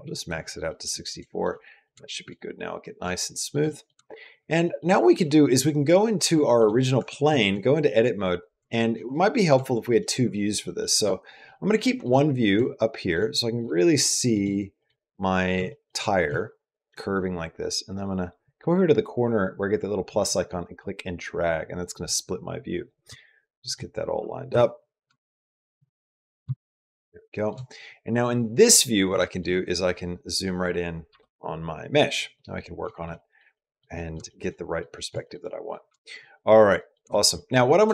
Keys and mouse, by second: 0.5 middle click, 1.0 shift+middle click, 1.4 middle click, 1.8 shift+middle click, 2.1 middle click, 2.9 shift+middle click, 3.5 middle click, 3.9 shift+middle click, 4.5 middle click, 4.8 shift+middle click, 6.2 shift+middle click, 6.8 Tab, 7.1 shift+click, 8.1 click, 8.4 shift+click, 9.5 shift+click, 10.1 shift+middle click, 10.4 middle click, 10.8 shift+middle click, 11.3 shift+click, 12.4 shift+click, 13.3 shift+middle click, 14.2 shift+middle click, 14.6 shift+click, 14.7 middle click, 14.8 click, 14.8 middle click, 15.5 shift+middle click, 15.8 middle click, 16.1 shift+middle click, 18.4-20.4 drag, 20.4-21.5 drag, 21.6 click, 22.0 click, 22.3 click, 22.9 shift+middle click, 24.3 n, 24.9 shift+middle click, 25.7 middle click, 26.3 shift+middle click, 29.1 shift+middle click, 29.5 click, 30.1 click, 30.2-30.9 typing, 32.3 middle click, 32.8 shift+middle click, 33.0 middle click, 33.4 middle click, 33.9 middle click, 34.4 middle click, 35.1 shift+middle click, 35.4 click, 35.9 shift+middle click, 36.1 click, 36.7 click, 37.0 shift+click, 37.3 click, 37.7 shift+click.